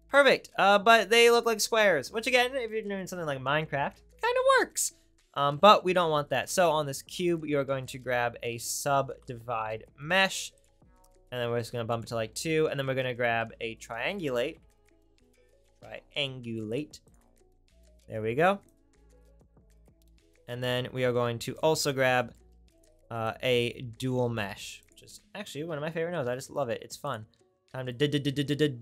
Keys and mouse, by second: 6.6 shift+a, 10.5 click, 10.6-11.9 right drag, 11.9-17.1 drag, 13.4 shift+a, 17.1 right click, 17.7-21.6 drag, 22.9 right click, 24.2 shift+a, 24.3-28.0 drag, 28.0-28.8 middle drag.